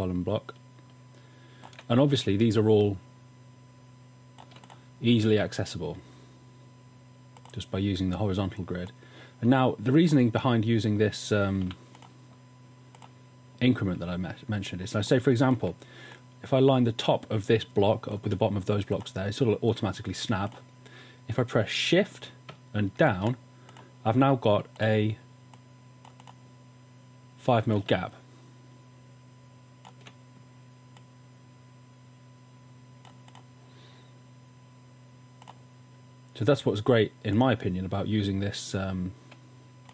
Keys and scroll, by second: 11.7 i, 23.2 shift+Down.